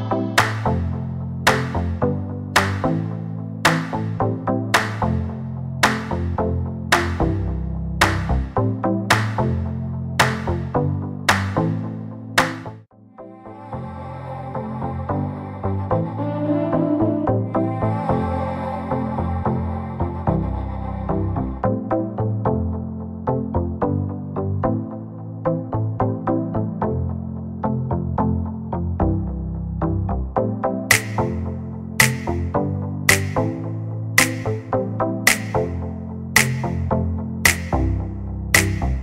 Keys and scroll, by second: 2.0 space, 3.5 Delete, 4.4 p, 5.5 space, 9.6 r, 11.3 p, 14.7 space, 15.4 m, 18.0 space, 18.5 p, 22.1 5, 22.3 Return, 24.0 space, 26.4-28.3 typing, 29.5 m, 30.0 Right, 31.8 space, 32.8 m, 33.3 Up, 33.8-35.4 typing, 36.9 m, 37.1 space, 38.0 m.